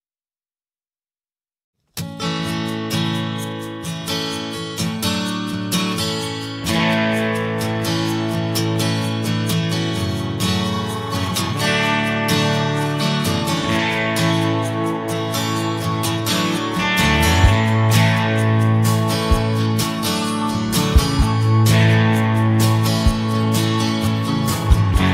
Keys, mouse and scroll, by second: 9.0-12.5 drag, 13.9 click, 14.4 click, 17.4 click, 18.2 ctrl+click, 21.2 click, 24.2 click.